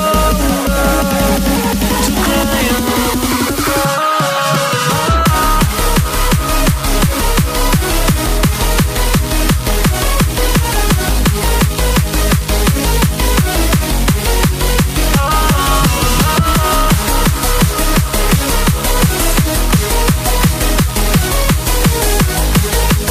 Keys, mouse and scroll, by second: 2.9 click, 9.3 click, 16.3 click, 18.7 Delete, 19.7 click.